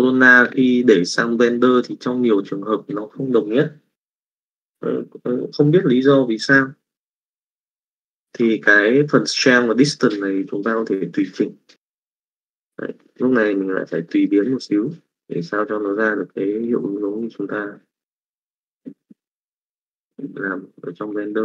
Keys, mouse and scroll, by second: 2.3 click, 11.7 click, 14.1 middle click, 14.8 middle click, 16.7-18.4 drag, 19.5 middle click.